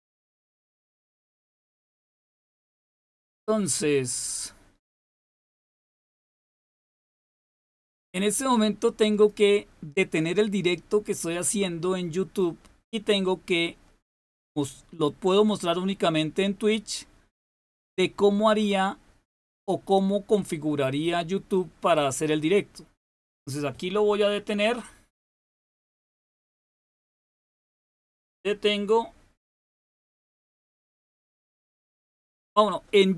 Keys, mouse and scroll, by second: 0.2-2.7 drag, 2.7-9.0 scroll down 2, 9.0 click.